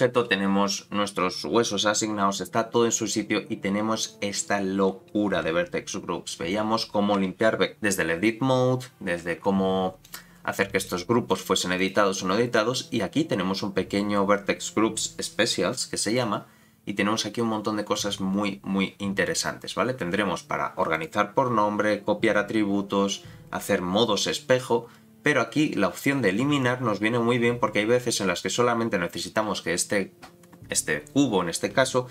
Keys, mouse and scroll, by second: 2.5-3.8 drag, 4.2-7.7 scroll up 14, 7.7-8.4 scroll up 1, 10.0 click, 10.8 click, 11.3 click, 11.8 click, 16.1-20.1 drag, 20.9-30.8 drag.